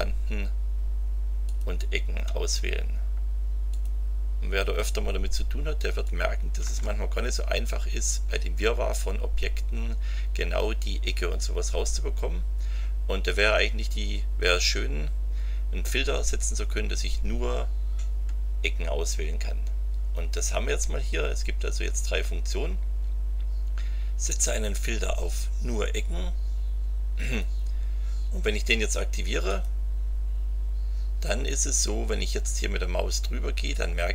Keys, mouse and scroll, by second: 1.4 ctrl+click, 3.7 click, 6.0 ctrl+click, 27.2 click, 29.5 click.